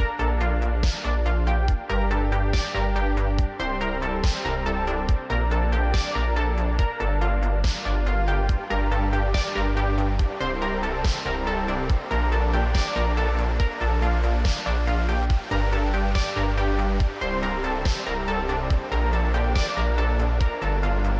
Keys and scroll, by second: 0.8 g, 1.5 g, 2.1 r, 3.0 g, 8.5 r, 8.6 x, 9.9 g, 10.6 g, 11.6 g, 12.8 alt+g, 12.9 alt+r, 14.3 ctrl+Tab, 14.6 ctrl+Tab, 15.2 r, 16.5 r, 17.0 r, 17.1 r, 19.5 ctrl+Tab.